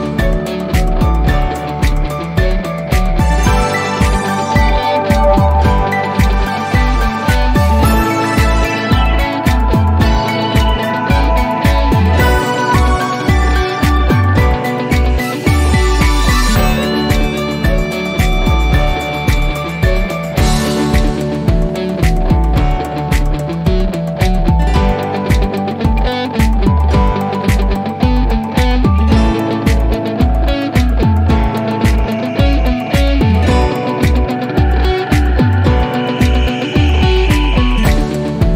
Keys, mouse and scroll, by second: 1.4 click, 3.5-4.0 click, 4.5-5.6 typing, 5.8 Return, 8.1 click, 9.0-10.1 scroll down 1, 10.1-11.2 scroll up 1, 11.2 click, 15.9 click, 21.0-21.5 drag, 22.0-23.8 typing, 25.1 click, 27.5 click, 31.6-32.6 typing, 32.9 Return, 34.5-38.1 drag.